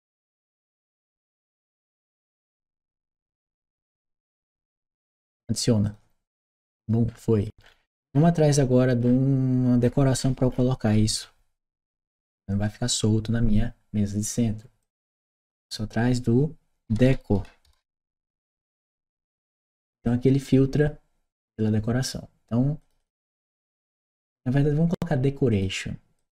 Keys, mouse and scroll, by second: 5.7 click, 6.9-8.6 scroll down 1, 8.6-9.6 scroll down 1, 9.6-10.1 scroll up 1, 10.1-10.8 scroll up 1, 14.6 click, 15.2 click, 19.8 click, 22.6 click, 22.8 click, 25.3 click, 26.0 click.